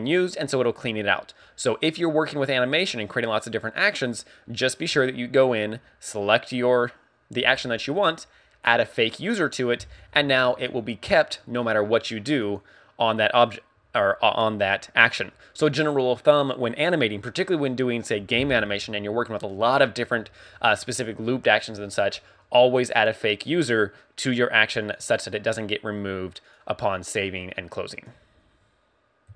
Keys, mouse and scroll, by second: 12.6 click.